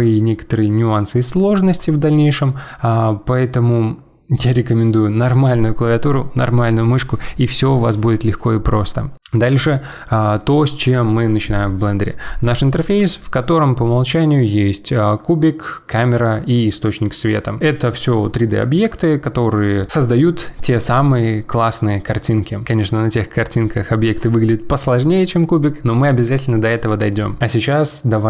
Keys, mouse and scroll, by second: 12.9 click, 13.9 click, 17.2 click.